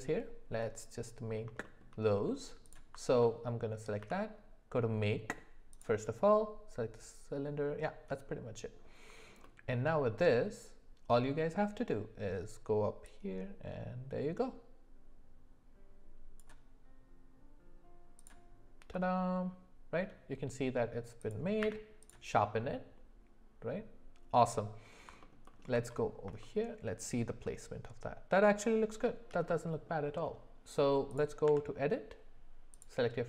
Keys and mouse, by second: 0.6-1.4 middle drag, 1.6 shift+middle drag, 4.0 d, 9.4-10.0 middle drag, 14.1-18.3 drag, 18.9-20.0 middle drag, 21.2 click, 21.6 q, 25.2 alt+middle click, 25.5 alt+middle click, 26.4 shift+middle click, 29.5 middle click, 31.4 Tab, 32.7 click.